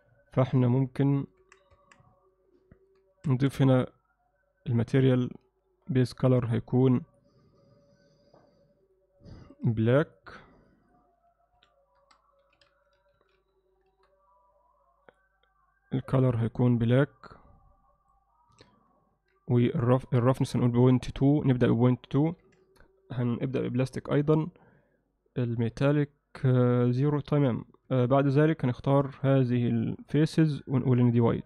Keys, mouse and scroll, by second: 1.4 Tab, 1.8 Tab, 2.3 alt+middle click, 5.9 middle click, 7.1 click, 8.9 click, 9.4-14.7 drag, 18.5 Tab, 20.4 click, 21.6-23.3 drag, 27.9 3, 28.3 click, 28.8 click, 29.6 click.